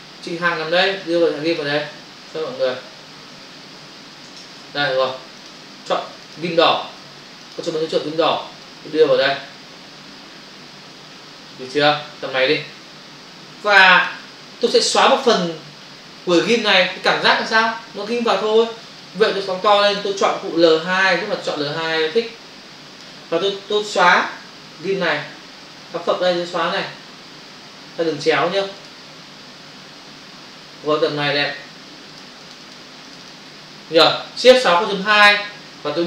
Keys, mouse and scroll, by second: 1.0 click, 3.3 ctrl+alt+z, 4.3 ctrl+shift+z, 5.7 click, 6.2 ctrl+click, 6.4 ctrl+double click, 7.4 ctrl+click, 7.6 ctrl+click, 8.7 click, 19.0 ctrl+click, 20.9 l, 21.5 click, 28.7 click, 28.9 click, 32.2 click, 32.4 click, 32.7 double click, 33.0 click, 33.2 click, 33.3 double click, 34.8 shift+F6, 35.6 Return.